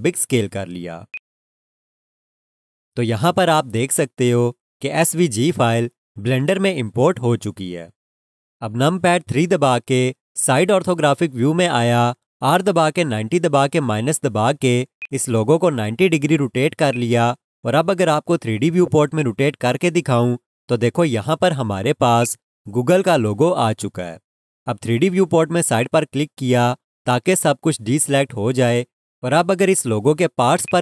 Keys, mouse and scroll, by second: 1.1 click, 4.9 alt+click, 6.3 alt+click, 9.9 3, 12.6-14.2 typing, 15.0 click, 18.6-19.0 scroll down 1, 19.0 scroll, 19.8 alt+click, 22.2 alt+click, 25.8 click, 30.6 click.